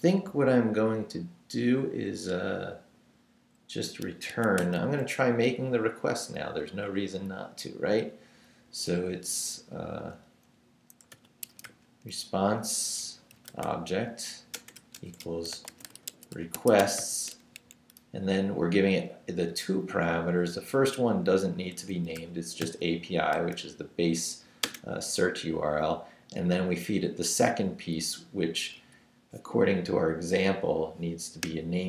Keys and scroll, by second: 1.8 Down, 4.3 Escape, 4.6 o, 10.9-17.5 typing, 21.5-23.4 typing, 24.6 space.